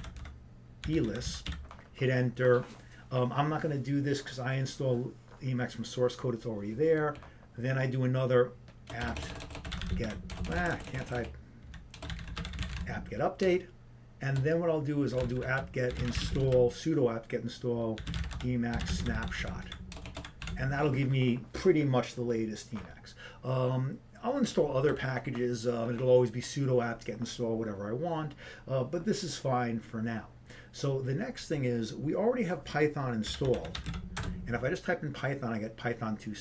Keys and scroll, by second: 9.2-11.5 typing, 18.3-19.1 typing, 20.3 typing, 25.0 BackSpace, 35.1 Return, 35.1 typing.